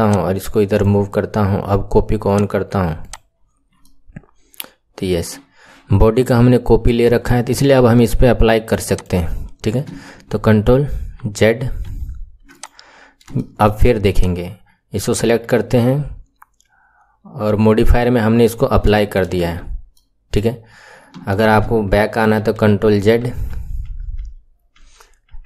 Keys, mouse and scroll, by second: 0.0 click, 2.2 click, 3.0 click, 3.4-3.7 scroll up 3, 3.7-4.7 right drag, 3.7 middle click, 4.7 middle click, 4.7 right click, 6.7 middle click, 7.0 KP_1, 8.8 click, 9.3-10.2 scroll down 2, 10.2 ctrl+z, 10.6 ctrl+z, 12.0 ctrl+z, 12.4 click, 12.8-13.3 scroll up 8, 13.3 shift+middle click, 14.1 click, 18.8 shift+middle click, 19.3 Tab, 19.8-21.0 middle drag, 21.0 KP_1, 22.4 ctrl+z, 22.7 ctrl+z, 23.0 ctrl+z, 23.3 ctrl+z, 23.5 ctrl+z, 23.8 ctrl+z, 24.2 ctrl+z, 24.7 ctrl+z, 25.3 ctrl+z.